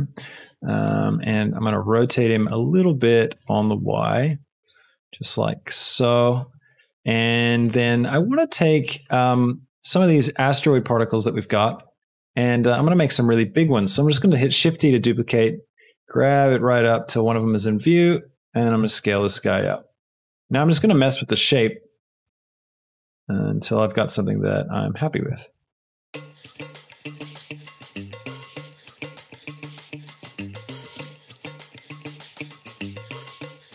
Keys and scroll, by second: 14.1 shift+d, 14.5 Escape, 15.6 g, 17.3 s, 19.6 g, 20.2 x, 20.2 s, 21.0 y, 22.3 s, 22.4 z, 25.2 Escape, 25.9-31.8 typing, 26.2 Escape, 30.4 Escape, 33.0-33.7 typing.